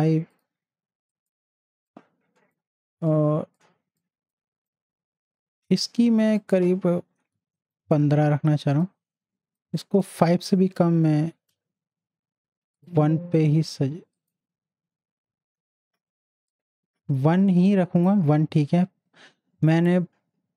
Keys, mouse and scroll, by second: 0.3-6.4 drag, 12.7 click, 12.8 click, 16.5 click, 16.5 click.